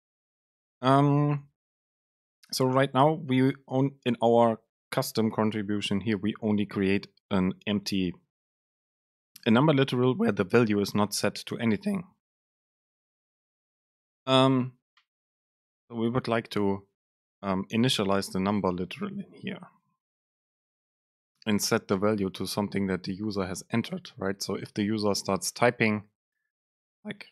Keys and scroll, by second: 1.9 Down, 2.2 End, 2.8 shift+Left, 17.9 Down, 18.2 End, 18.4 Left, 19.5 shift+Right, 20.4 shift+Left, 21.0 alt+super+v, 21.8 Up, 22.1 BackSpace, 23.1 End, 23.4 super+Left, 24.8 Left.